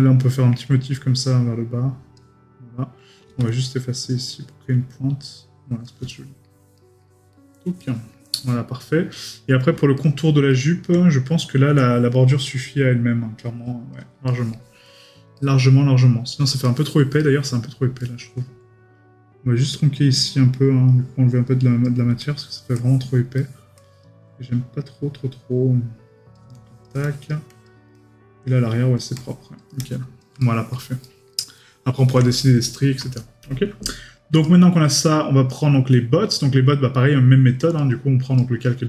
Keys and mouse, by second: 6.1 right click, 7.3 middle click, 10.0 right click, 14.3 right click, 14.8 middle click, 16.6 right click, 23.4 middle click, 27.9 middle click, 30.4 right click, 31.7 middle click, 32.6 right click.